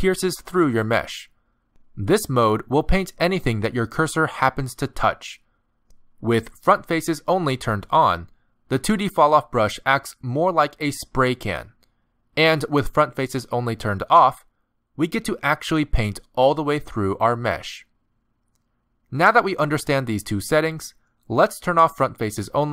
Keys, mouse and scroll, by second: 0.2-1.5 click, 0.5 click, 0.7 click, 1.0 click, 1.2 click, 2.0-2.4 scroll down 2, 2.5 middle click, 5.8 middle click, 8.9 click, 10.8 middle click, 14.0 click, 14.6 middle click, 15.1 click, 16.6 middle click, 17.9 click, 18.6 middle click.